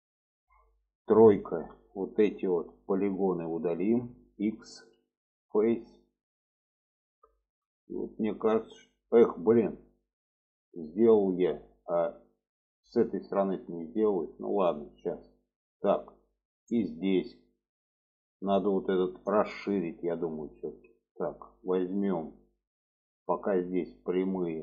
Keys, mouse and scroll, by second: 0.8 middle click, 1.7 3, 2.8 click, 3.3 shift+click, 3.8 shift+click, 4.9 x, 6.3 middle click, 7.4 shift+middle click, 8.6 shift+middle click, 9.9 middle click, 12.1 middle click, 13.1-14.8 middle drag, 15.4 alt+middle click, 16.8-17.8 middle drag, 18.3-20.1 middle drag, 21.4 click, 21.9 middle click, 23.1 middle click, 24.4 shift+click.